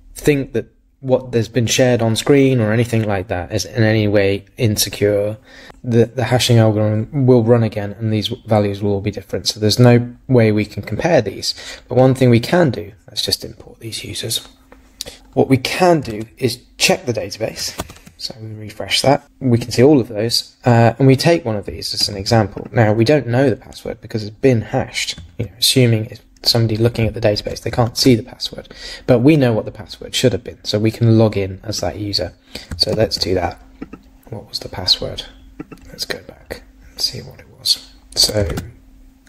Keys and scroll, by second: 16.1 super+Tab, 17.8 super+r, 22.0 super+c, 27.9 super+Tab, 32.9 super+v, 38.5 super+Tab.